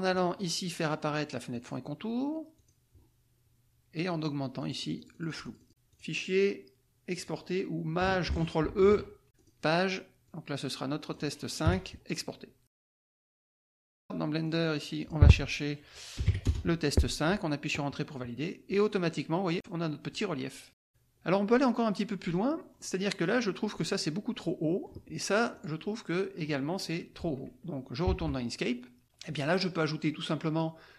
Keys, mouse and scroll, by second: 1.5 click, 2.5 click, 4.6-5.7 drag, 5.9 click, 7.1 click, 8.7 ctrl+shift+e, 9.4 click, 10.2-11.6 drag, 11.6 KP_5, 12.9 alt+Tab, 14.4 click, 15.0 click, 16.2 Delete, 16.3 KP_5, 16.4 Return, 20.0 click, 20.8 scroll up 1, 21.3 click, 21.4 middle click, 21.8-22.9 drag, 24.5 click, 25.7 click, 28.1 alt+Tab, 29.0 click.